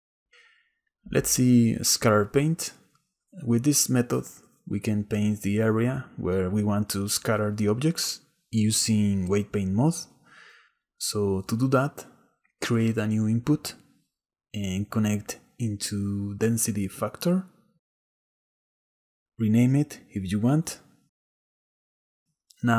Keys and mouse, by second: 10.0 click, 13.2-16.1 drag, 17.4-19.8 middle drag, 20.4 a, 20.7 click, 20.7 BackSpace, 21.7 middle click, 22.2-22.6 middle drag.